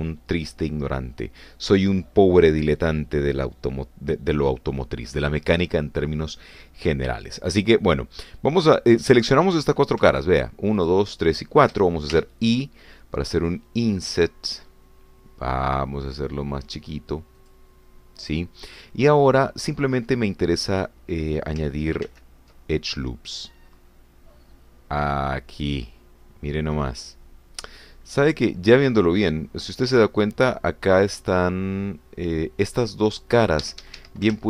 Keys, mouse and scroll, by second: 10.5 click, 11.1 shift+click, 11.8 shift+click, 12.1 shift+click, 13.6 shift+i, 18.4 click, 23.0 ctrl+r, 24.7-25.4 scroll up 2, 25.4 scroll up 1, 26.2 scroll up 2.